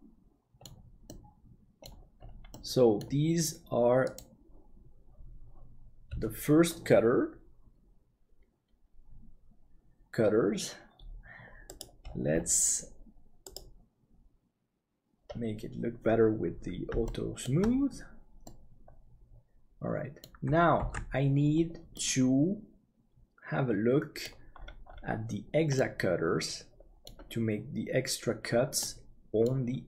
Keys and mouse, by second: 1.0 middle click, 2.5 middle click, 17.0 shift+middle click, 18.4-21.1 middle drag, 20.9 ctrl+s, 21.9-24.3 middle drag, 25.7-27.0 middle drag, 28.8 middle click.